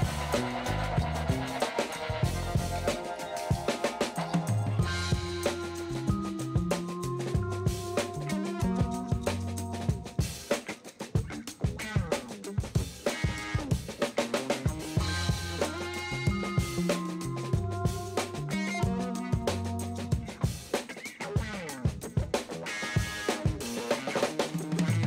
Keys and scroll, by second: 0.2 ctrl+alt+z, 3.1 shift+space, 3.5 shift+space, 3.8 ], 5.7 ctrl+alt+z, 7.2 space, 9.8 ], 16.0 space, 16.8 ], 18.3 space, 19.4 space, 22.1 [, 23.5 space.